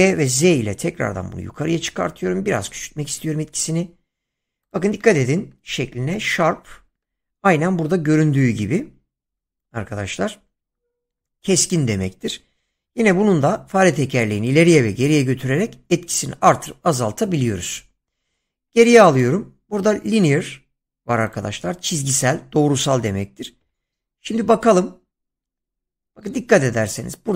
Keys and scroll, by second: 0.4 z, 18.1 ctrl+z, 23.6 g, 24.4 z.